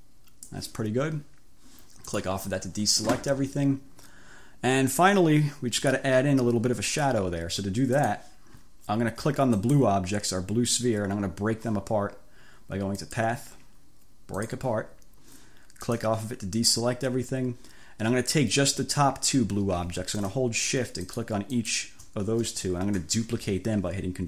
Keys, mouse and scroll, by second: 2.2 click, 5.9 click, 8.1 click, 9.7 click, 13.1 click, 14.4 click, 15.9 click, 21.1 shift+click, 21.7-22.0 shift+scroll up 1.